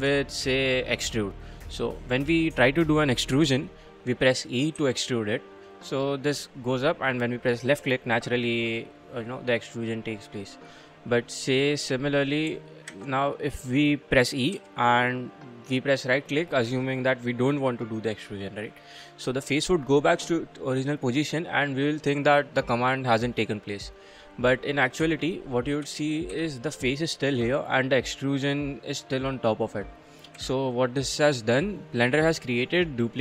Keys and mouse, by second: 0.4 shift+click, 1.6 click, 1.8 click, 2.0 middle click, 4.8 e, 6.0 click, 9.3 middle click, 9.7 middle click, 12.9 ctrl+z, 14.5 e, 19.2 click, 25.0 1, 25.8 3, 26.1 click, 26.3 g, 29.7 click, 30.4 1, 32.8 click.